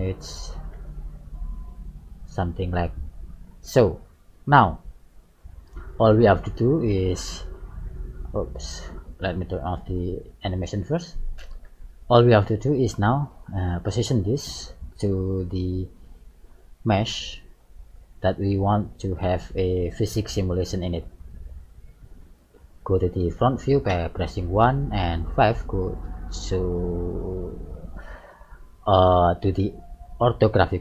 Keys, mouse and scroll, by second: 0.9 g, 3.9-4.8 scroll down 4, 4.8 middle click, 6.3 middle click, 7.4 click, 9.1 click, 10.0 click, 11.0 click, 12.5 middle click, 13.4 shift+middle click, 16.5 click, 17.6 middle click, 19.0 click, 21.3 middle click, 23.9 KP_1, 25.0 KP_5, 26.1-26.7 scroll down 5, 26.7 shift+middle click, 27.4-28.2 scroll up 5.